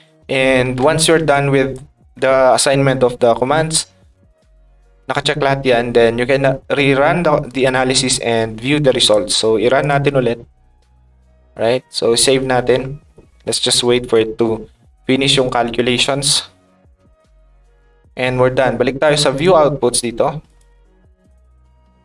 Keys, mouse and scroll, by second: 1.3 ctrl+click, 9.0 click, 9.8 click, 12.1 click, 19.3 click, 20.4 click.